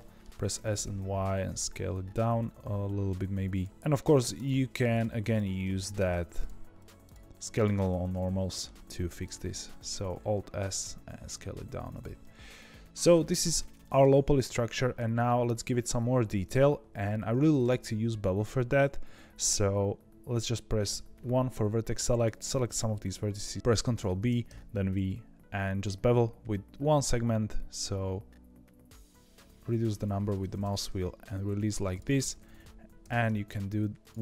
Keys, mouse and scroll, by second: 0.5 s, 4.0 shift+click, 4.3 shift+click, 4.8 shift+click, 5.2 shift+click, 5.5 middle click, 6.2 shift+click, 6.3 shift+click, 6.7 shift+click, 7.0 shift+click, 7.5 shift+click, 7.8-9.0 middle drag, 9.0 alt+s, 12.1-16.9 middle drag, 16.9-17.4 scroll up 1, 17.4-20.5 shift+middle drag, 22.1 click, 24.0 ctrl+b, 31.8 click, 32.9 ctrl+b.